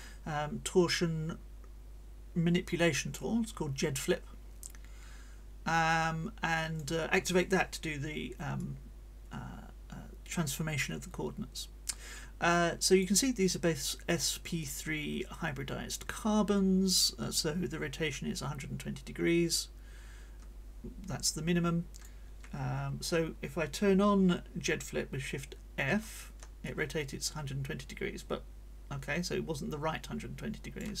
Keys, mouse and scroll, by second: 8.6-13.2 drag, 14.6-22.2 drag, 25.8 shift+f, 26.6-31.0 shift+drag.